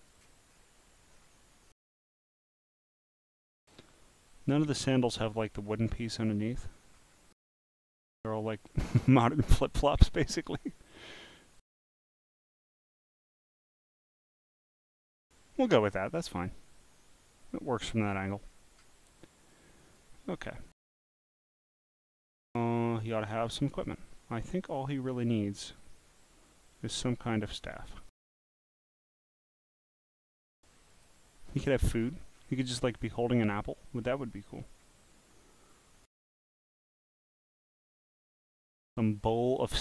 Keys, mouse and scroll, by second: 0.5 scroll down 5, 1.1 scroll down 1, 1.9 scroll, 2.5-3.3 scroll, 4.8 scroll down 1, 4.9 scroll down 1, 4.9 scroll down 1, 5.2 scroll down 1, 5.2 scroll, 5.5 scroll down 1, 5.5 scroll down 1, 5.6 scroll down 1, 5.9-7.0 scroll up 16, 7.6 scroll up 1, 7.6 scroll, 7.7 scroll, 7.7 scroll, 8.1 scroll, 8.1 scroll, 8.6 scroll, 8.7 scroll, 8.7 scroll, 12.8 click, 13.4 click, 15.6 click, 16.2 scroll down 1, 18.4-18.9 scroll down 10, 19.5 click, 23.0 click, 30.9 click, 32.0-32.5 scroll down 8, 33.0 scroll up 4, 33.5 scroll down 2, 34.0 scroll, 34.6-35.2 scroll, 35.6 scroll, 37.9 click.